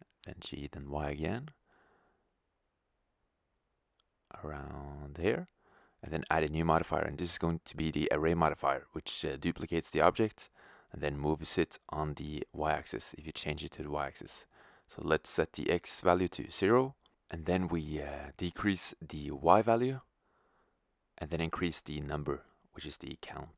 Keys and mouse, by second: 2.0 g, 14.3 click, 16.6-23.3 drag, 23.3-23.5 middle drag.